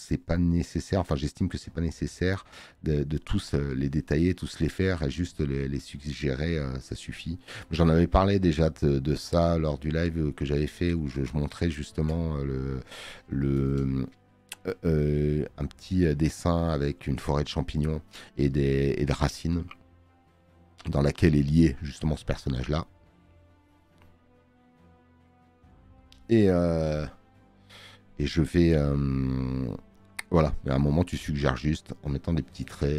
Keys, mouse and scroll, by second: 3.7 space.